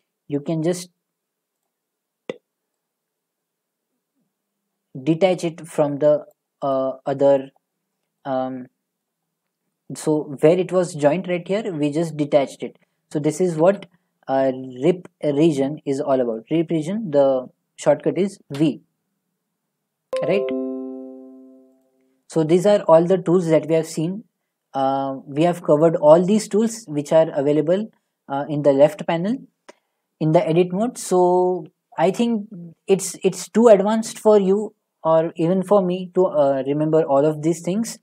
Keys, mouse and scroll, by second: 0.3 g, 1.6 right click, 6.3 click, 7.4 middle click, 9.0 middle click, 10.5 middle click, 13.6 ctrl+z, 18.6 v, 21.8 right click, 22.9 middle click, 23.4 middle click, 23.5 middle click, 24.3 middle click, 24.4 middle click, 24.5 middle click, 24.5 middle click, 25.1 scroll, 26.8-27.3 scroll.